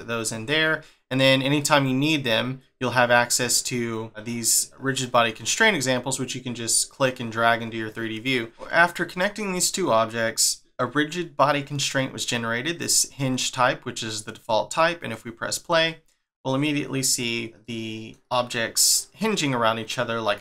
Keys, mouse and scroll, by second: 0.6 scroll up 2, 2.2-3.6 scroll down 1, 5.7 scroll up 2, 8.5 shift+middle click, 15.0 click, 17.6 middle click.